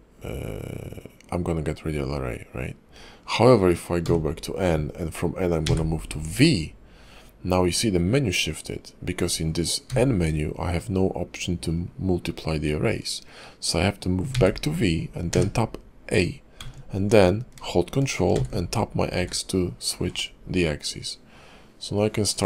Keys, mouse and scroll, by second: 1.2-2.9 scroll down 2, 2.9-4.0 scroll up 1.